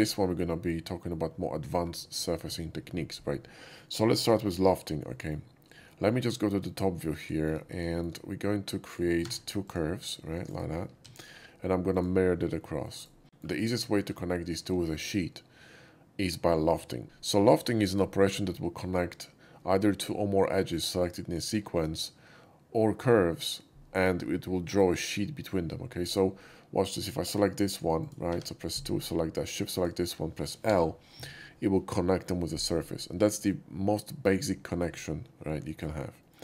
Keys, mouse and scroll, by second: 5.0 middle click, 5.8 alt+middle click, 6.6 alt+middle click, 7.3 shift+middle click, 7.8 shift+middle click, 9.2 shift+a, 9.6 click, 10.3 click, 11.0 alt+x, 11.9 click, 12.5 middle drag, 12.9 right click, 13.2 shift+middle click, 13.9 shift+middle click, 20.1 typing, 27.2 click, 27.6 click, 27.9 click, 28.3 2, 28.6 click, 29.7 shift+click, 30.6 l, 35.6 shift+middle click, 36.1 shift+middle click.